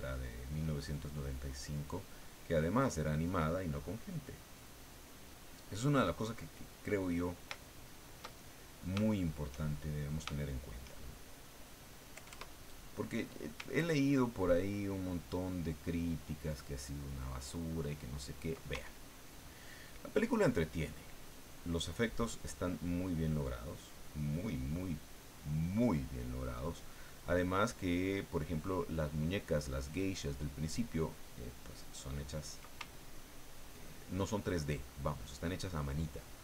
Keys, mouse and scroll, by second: 2.3-4.3 drag, 7.6-9.6 shift+drag, 9.7 shift+middle click, 10.3 shift+middle click, 10.9 shift+middle click, 12.1 KP_Add, 13.8-18.6 ctrl+drag, 18.8-32.5 ctrl+drag, 32.8-36.4 ctrl+drag.